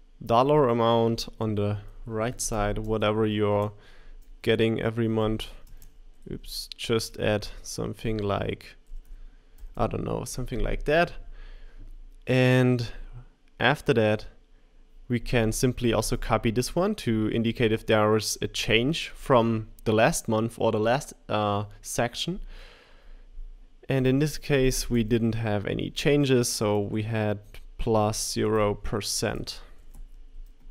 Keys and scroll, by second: 3.5-5.7 typing, 6.8 typing, 8.6-9.6 typing, 16.0 super+c, 25.9 super+a, 27.4 space, 27.9 5, 29.1-30.7 typing.